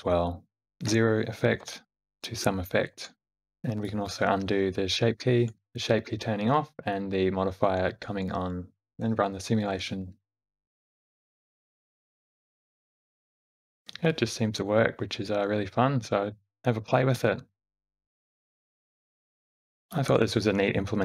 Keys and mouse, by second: 1.4 i, 3.5 click, 4.1 shift+d, 5.6-8.1 drag, 8.8 shift+Left, 9.6 space, 13.8 shift+Left, 13.8 space, 13.8 g, 14.3 space.